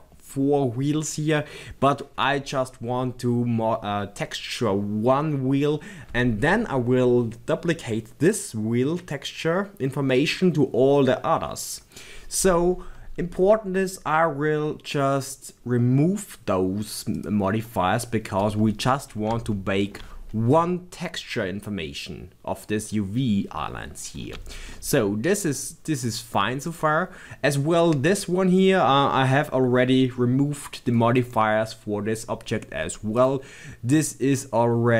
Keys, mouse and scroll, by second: 15.1 click, 17.1 click, 18.5-26.7 middle drag, 19.0 scroll up 1, 24.0 scroll down 1, 26.0-26.7 scroll up 2, 26.7 click, 27.1-30.9 scroll down 2, 33.2 click, 34.0-34.9 middle drag.